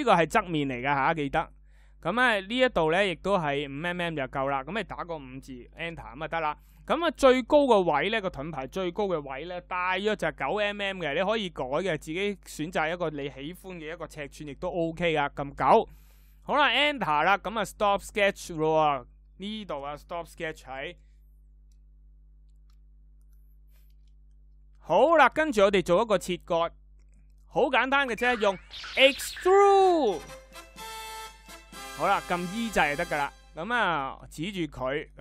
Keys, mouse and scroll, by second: 5.5 Return, 28.0 e.